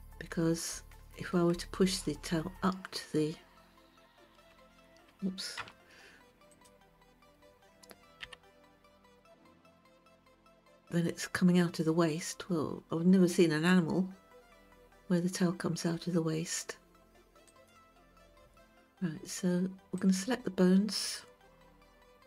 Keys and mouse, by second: 4.6 KP_1, 5.6 KP_3, 6.5 click, 8.2 g, 17.5-20.0 right drag, 20.0 click.